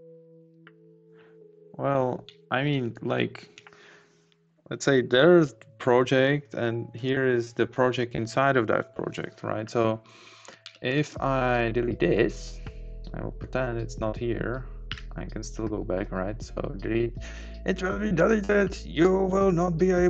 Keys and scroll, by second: 1.2 Up, 2.2 Up, 2.8 Down, 5.5 Up, 10.6 Down, 10.9 Up, 15.1 Delete.